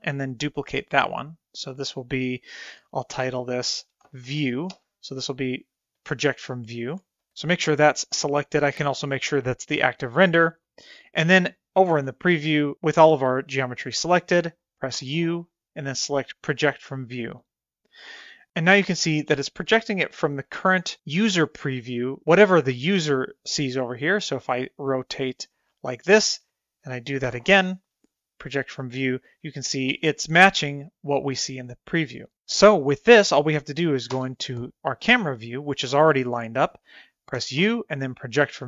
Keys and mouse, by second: 0.5 click, 2.0-4.8 drag, 7.3 click, 14.9 u, 24.0-25.2 middle drag, 27.3 u, 34.1 KP_0, 37.3 u.